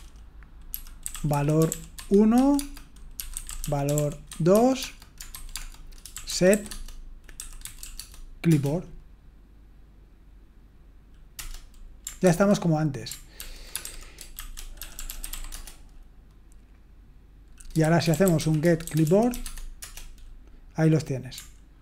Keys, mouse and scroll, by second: 0.7-7.8 typing, 11.3 Return, 12.2 ctrl+c, 13.3 ctrl+p, 13.7-15.8 typing, 17.6-19.8 typing, 19.8 Return.